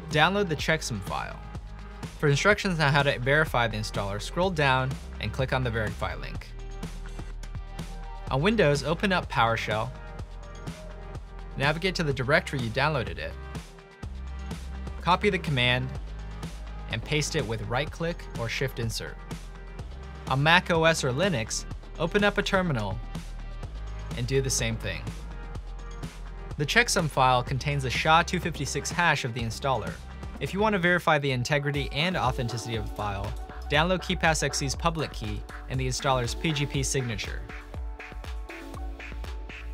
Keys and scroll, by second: 2.2-3.5 typing, 5.4 typing, 6.4 ctrl+3, 8.1-12.5 typing, 12.7 Tab, 13.6 Return, 14.9 ctrl+c, 17.7 Return, 19.2 Return, 19.4 super+space, 19.9-25.2 typing, 25.6 Tab, 26.6 Tab, 27.2 Return, 27.3-29.2 typing, 31.3 typing, 33.4 ctrl+2.